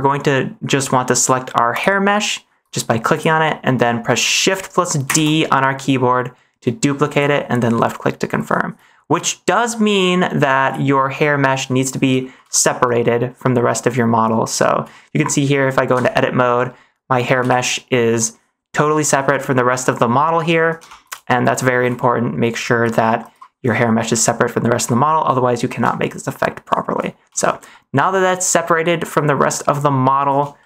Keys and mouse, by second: 1.7-4.4 drag, 5.2 shift+d, 9.5 click, 12.4 shift+middle click, 15.9 Tab, 16.5 middle click, 17.3 a, 21.0 Tab, 21.3-21.7 shift+middle drag, 21.9 middle click, 22.6 -, 23.1 -, 24.2-25.0 shift+middle drag, 25.9-26.8 shift+middle drag, 27.3 shift+middle click, 27.6 middle click, 30.5 shift+middle click.